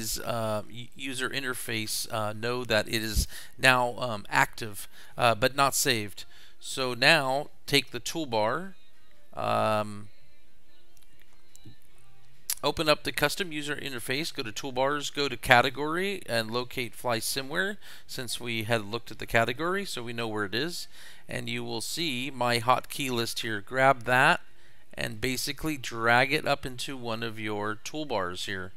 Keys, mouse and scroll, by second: 1.6 click, 2.7 click, 4.8 click, 7.3 click, 15.6 click, 17.1-17.5 scroll up 2, 19.6 click, 22.7 click, 24.1-28.7 drag.